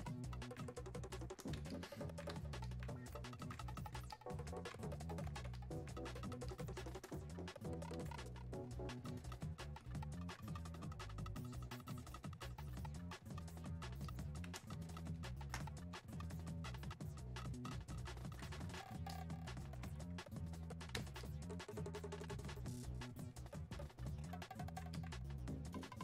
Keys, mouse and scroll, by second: 9.8-13.3 drag, 14.0 click, 14.7 space, 15.2 click, 15.2 space, 16.0-26.0 drag.